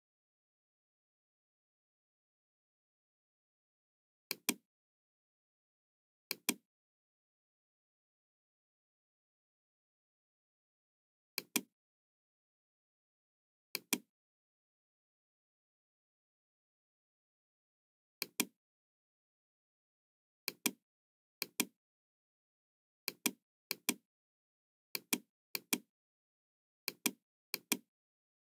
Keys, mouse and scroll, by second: 3.2 KP_2, 4.3 click, 6.2-9.4 drag, 11.3 click, 13.6 click, 18.1 click, 18.9 scroll down 1, 20.4 click, 21.3 click, 23.0 click, 23.7 click, 24.9 click, 25.5 click, 26.8 click, 27.5 click.